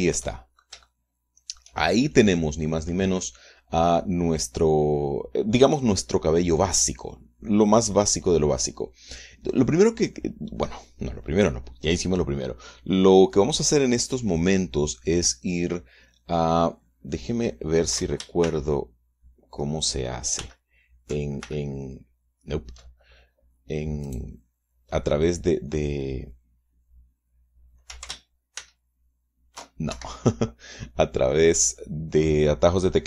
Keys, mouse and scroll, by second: 19.0 ctrl+alt+shift+m, 21.0 ctrl+alt+shift+m, 22.0 ctrl+alt+shift+m, 24.6 click, 29.2 ctrl+alt+shift+s, 30.5 ctrl+alt+shift+Escape.